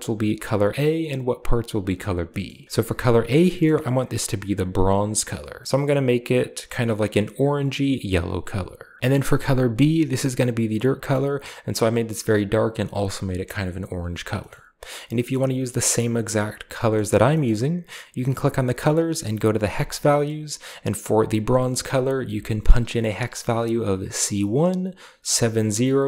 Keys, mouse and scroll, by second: 2.4 middle click, 2.5 scroll up 2, 3.2 scroll down 2, 3.6-4.6 middle drag, 4.6 click, 6.3-9.0 drag, 9.6-10.3 drag, 14.3-14.8 middle drag, 14.6 click, 15.1 middle click, 15.1-16.6 scroll down 1, 16.8 middle click, 17.3-18.2 middle drag, 18.2-18.9 drag, 19.5 click.